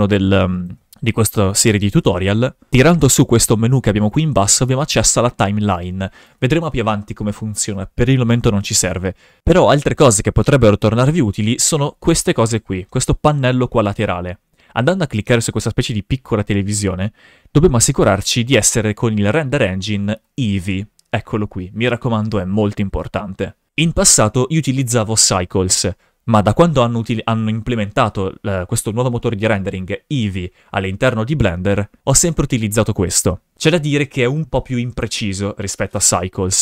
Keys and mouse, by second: 0.1 click, 2.7-4.6 drag, 4.9-6.2 drag, 15.2 click, 20.2-36.6 drag.